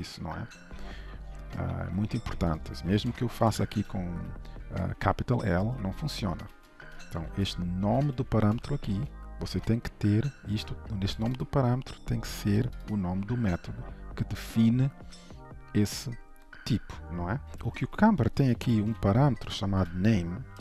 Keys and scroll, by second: 3.8 ctrl+s, 6.3 ctrl+z, 8.2 ctrl+shift+Right, 8.9 ctrl+s.